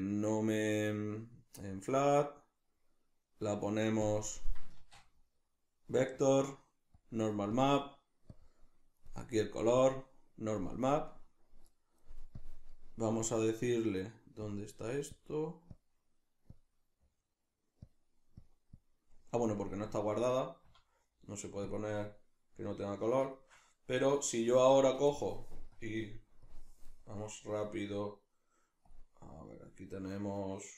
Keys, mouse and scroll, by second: 4.8 shift+a, 7.6 click, 8.3 click, 9.8 click, 10.9-12.4 middle drag, 12.4 click, 14.5 click, 15.7 click, 17.9 click, 18.4 click, 20.3-25.8 middle drag, 20.7 z, 25.8-30.7 drag.